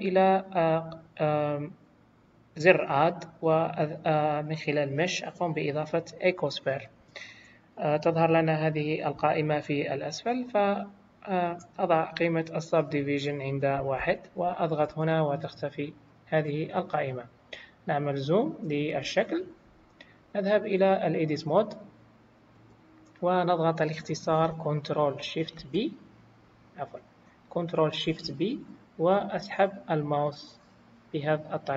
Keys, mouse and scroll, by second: 2.9 click, 9.1 click, 15.9 click, 16.9-18.0 scroll up 5, 18.3-18.9 scroll up 4, 18.9 scroll down 1, 20.3 click, 25.5 shift+b, 28.0 ctrl+shift+b.